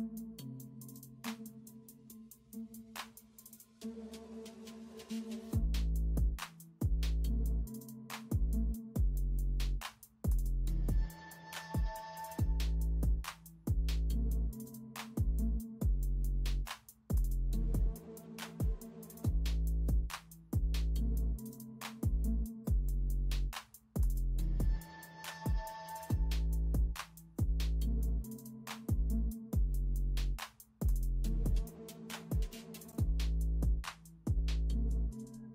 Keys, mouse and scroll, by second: 1.4 alt+click, 1.5 space, 2.2 alt+click, 3.0 space, 4.7 alt+click, 5.2 alt+click, 6.7 alt+click, 6.9 space, 8.3 alt+click, 8.4 space, 9.1 alt+click, 10.5 space, 10.8 ctrl+alt+z, 11.0 ctrl+alt+z, 11.7 alt+click, 12.1 space, 13.3 space, 14.2 ctrl+alt+z, 14.4 ctrl+alt+z, 14.8 alt+click, 15.4 alt+click, 15.5 space, 16.1 ctrl+alt+z, 17.8 alt+scroll down 1, 18.0 alt+scroll up 1, 19.4-19.8 alt+scroll down 1, 19.8 alt+scroll up 1, 21.3 alt+scroll down 1, 21.5-21.9 alt+scroll up 1, 23.9 alt+scroll up 1, 25.7 space, 28.2 alt+scroll down 1, 28.4 alt+scroll up 1, 29.5 space, 31.9 ctrl+alt+z, 32.5 alt+click, 33.3 alt+scroll down 1, 33.5 space, 33.7 alt+scroll up 1, 34.7 alt+click, 35.2 space.